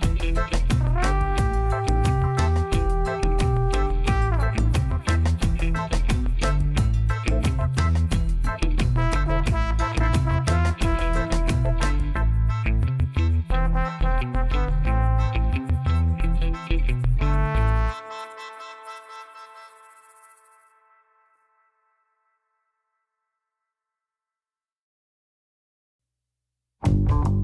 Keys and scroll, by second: 2.5 shift+z.